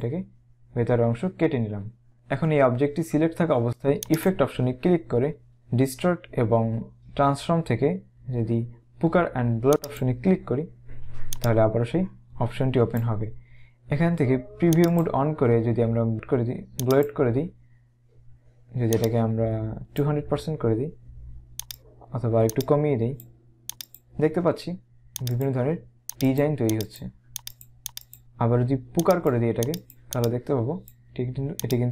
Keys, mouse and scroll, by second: 4.2 click, 10.0 click, 11.4 click, 14.8 click, 16.9 click, 19.0 click, 21.8 click, 22.6 click, 25.4 click, 29.1 click.